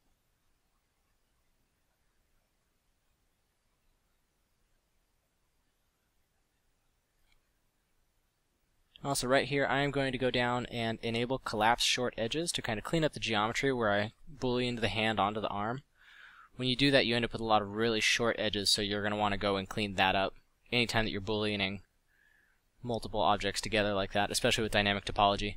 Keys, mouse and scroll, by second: 0.8 f, 2.4 f, 5.3 f, 6.4 f, 7.8 f, 12.5 f, 20.9 f.